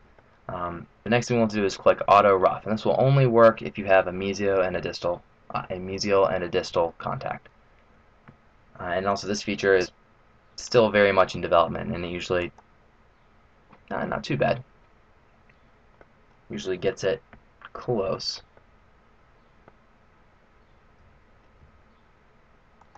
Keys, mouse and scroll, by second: 12.3 click, 14.0 middle click, 17.8 middle click, 18.6 middle click, 22.8 g.